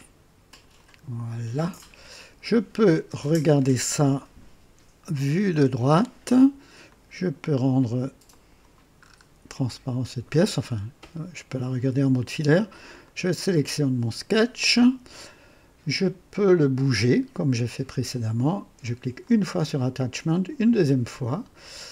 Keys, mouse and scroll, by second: 0.5 click, 1.7-2.4 drag, 3.4-4.1 drag, 5.4 KP_3, 6.8 click, 8.2 click, 9.0-9.3 scroll up 1, 9.6-10.2 right drag, 10.6 scroll up 1, 11.1-11.7 right drag, 13.0 click, 19.2 click, 20.3 click.